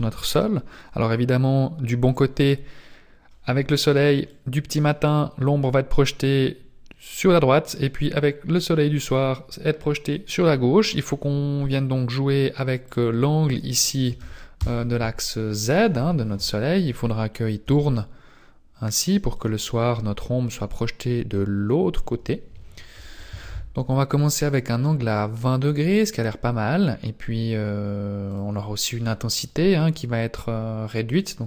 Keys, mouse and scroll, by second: 4.3 click, 15.9 KP_7, 17.6 r, 23.1 ctrl+z, 25.2-26.1 scroll up 3, 28.3 click, 29.3 click.